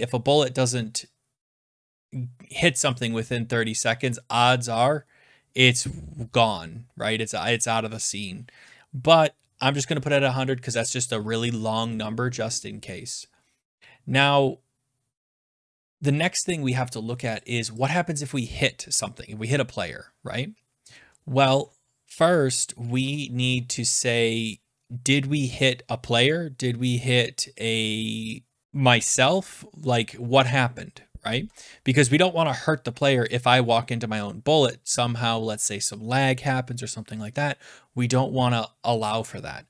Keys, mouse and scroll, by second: 16.6 scroll down 2, 17.5 click, 17.8 click, 20.8 Return.